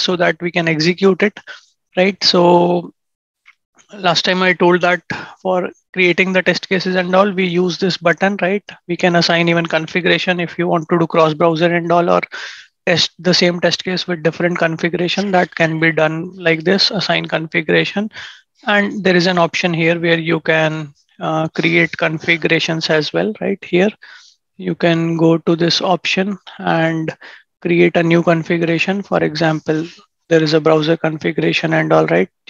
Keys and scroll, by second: 3.1 ctrl+shift+@.